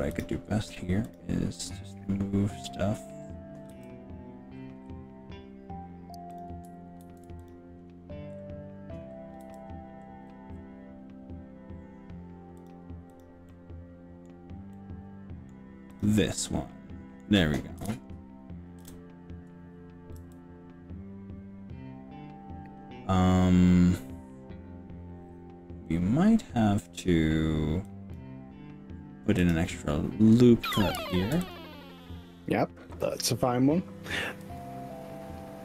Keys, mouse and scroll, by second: 1.6 click, 2.1 scroll up 1, 2.6 scroll down 1, 3.8 g, 4.2 scroll up 2, 4.6-5.2 scroll down 4, 6.4 click, 7.0 ctrl+z, 7.4 click, 7.9 scroll up 2, 9.1 scroll down 1, 9.4 g, 9.8 scroll up 1, 10.4-10.8 scroll down 2, 12.6 click, 13.2 click, 13.5 middle click, 14.7-15.5 middle drag, 16.0 click, 16.3 middle click, 17.8 KP_1, 18.8 KP_3, 20.2 g, 28.0 click, 29.4 click, 31.0 ctrl+r, 33.0 click, 34.4 s.